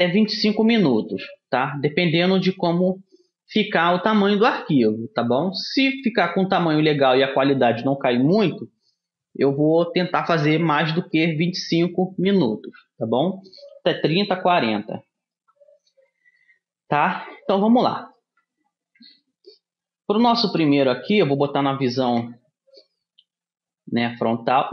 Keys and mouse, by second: 22.2 KP_1.